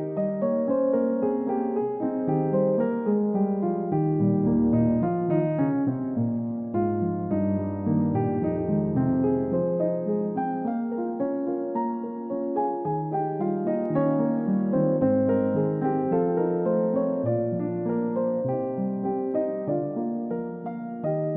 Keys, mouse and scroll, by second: 0.5 middle click, 3.5 double click, 6.0 middle click, 6.7 scroll down 1, 7.0 middle click, 7.4-7.9 scroll up 1, 8.2 middle click, 9.2-10.1 scroll up 1, 10.8 typing, 21.2 scroll down 1.